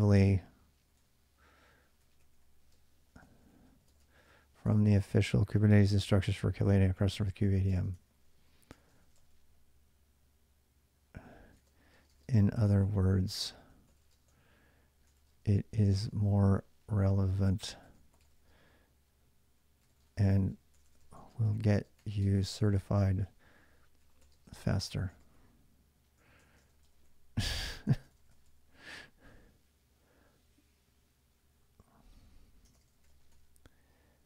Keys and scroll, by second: 0.0-9.8 typing, 11.0-28.7 typing, 27.7 ctrl+[, 32.5 ctrl+[, 32.7 typing, 32.9 Return.